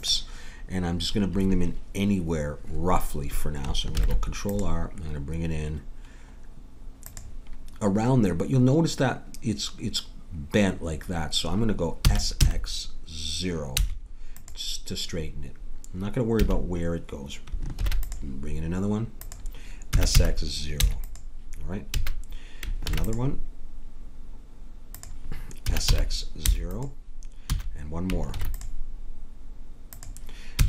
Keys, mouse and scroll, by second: 3.9 ctrl+r, 12.0 s, 16.4 a, 17.8 ctrl+r, 19.9 s, 21.9 a, 22.8 ctrl+r, 25.6 s, 27.5 a, 28.3 ctrl+r, 30.5 s.